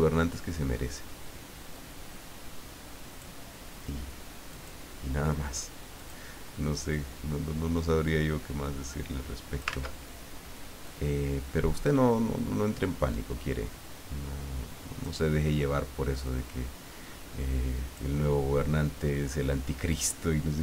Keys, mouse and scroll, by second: 1.7-3.4 drag, 4.5 click, 5.9 click, 8.7-9.9 drag, 9.7 ctrl+z, 10.8-15.2 drag, 16.2-18.7 drag, 19.9-20.6 drag.